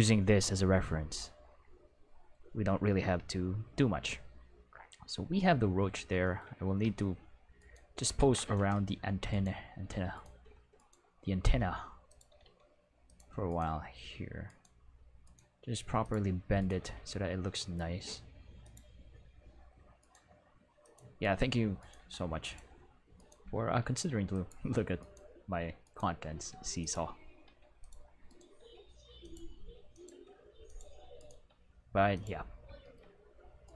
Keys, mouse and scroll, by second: 3.9 q, 6.8 q, 7.5 right click, 8.1 ctrl+Tab, 8.4 right click, 9.3 right click, 9.8 r, 10.1 right click, 10.7 right click, 11.4 r, 12.0 click, 12.3 r, 13.0 click, 13.4 right click, 14.4 right click, 15.2 right click, 15.4 g, 16.0 click, 16.5 right click, 16.8 r, 18.6 click, 18.7 middle click, 20.0 right click, 20.1 g, 20.8 click, 21.2 right click, 21.7 right click, 21.9 g, 22.4 click, 23.1 right click, 23.8 r, 24.3 click, 24.9 right click, 25.8 right click, 26.3 r, 26.8 click, 27.4 r, 27.8 click, 28.2 right click, 28.5 r, 29.2 click, 29.3 g, 29.9 click, 30.0 r, 30.6 click, 31.3 g, 32.1 click, 33.6 right click.